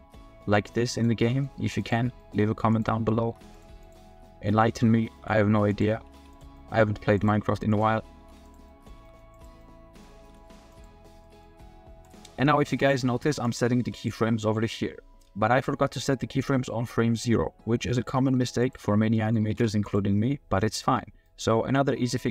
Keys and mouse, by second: 0.9-1.4 drag, 2.2 drag, 2.8 click, 3.2 r, 3.3 z, 3.8 click, 4.2-4.8 middle drag, 5.1 g, 5.2 click, 6.0 r, 6.1 z, 6.5 drag, 8.1 r, 8.2 z, 8.7 drag, 9.0 g, 9.6 middle click, 10.2 g, 11.2 click, 12.6 r, 13.5 click, 13.8 r, 17.0-18.1 middle drag, 19.1 middle click, 19.4 r, 19.5 z, 21.2-21.7 middle drag.